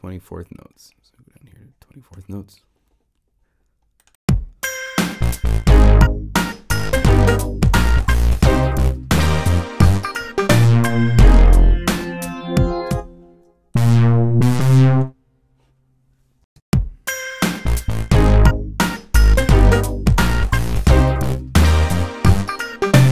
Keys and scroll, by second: 16.4 Home.